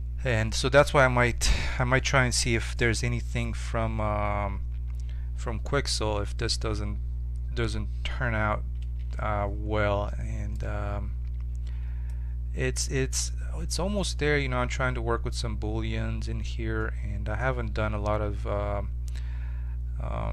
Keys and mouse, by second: 9.0 t, 11.8 middle click, 13.2-18.8 middle drag, 18.9-20.3 middle drag.